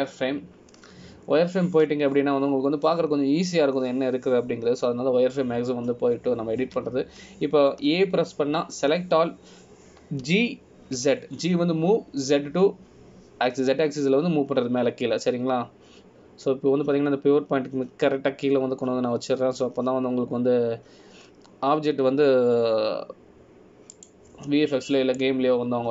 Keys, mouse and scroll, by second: 8.8 a.